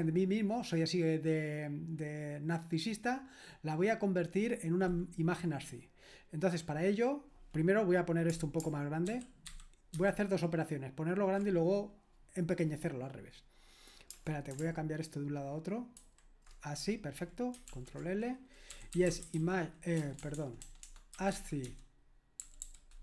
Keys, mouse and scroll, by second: 4.1 click, 9.1 ctrl+alt++, 9.5 ctrl+alt++, 10.0 ctrl+alt++, 16.1 super+h, 17.7 ctrl+l, 18.5-23.0 typing.